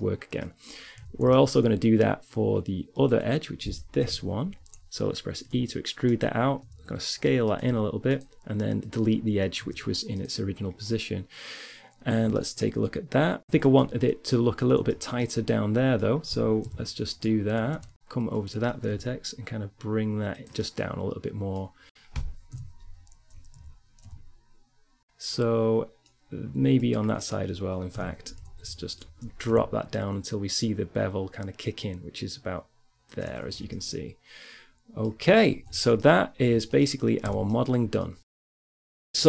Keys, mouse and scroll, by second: 0.4 z, 2.9-3.9 middle drag, 4.0 KP_3, 5.0 middle click, 5.7 e, 6.9 s, 7.9 g, 8.8 x, 11.8 z, 15.2 KP_3, 16.6 ctrl+Tab, 17.4 g, 20.9 KP_3, 22.1 z, 22.7 g, 22.9-24.0 middle drag, 24.4 middle click, 24.6 z, 25.3 middle click, 25.8-28.8 middle drag, 28.2 KP_3, 28.6 z, 29.8 g, 32.9 middle click, 33.1 z, 37.4 Tab.